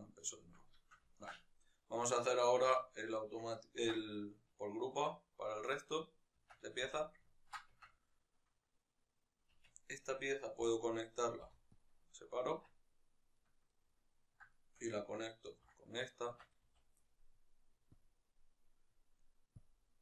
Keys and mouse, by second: 0.5-5.4 ctrl+shift+middle drag, 5.4-6.2 right drag, 6.2 Tab, 7.0-8.2 ctrl+middle drag, 7.5 Tab, 8.2-9.4 right drag, 9.4 Tab, 9.6 right click, 10.4 l, 11.6 p, 12.4 Tab, 12.6 right click, 14.2 shift+right click, 15.2 ctrl+j, 16.2 Tab, 16.4 a.